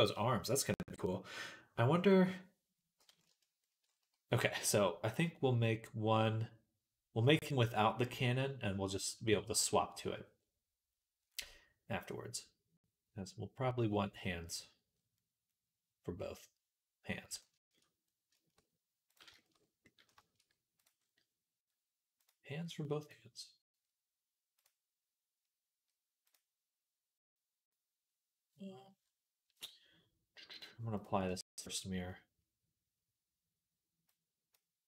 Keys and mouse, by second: 2.1-19.3 middle drag, 19.6-22.0 middle drag, 22.0-34.3 drag, 34.3 middle click.